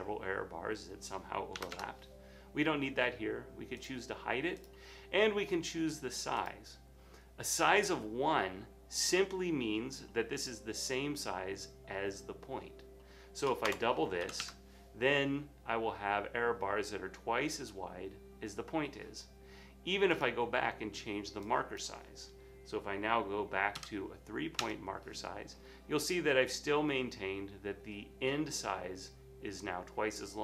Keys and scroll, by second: 1.7 typing, 1.7 Return, 13.8-14.9 typing, 17.5 typing, 23.9 3, 27.7 typing.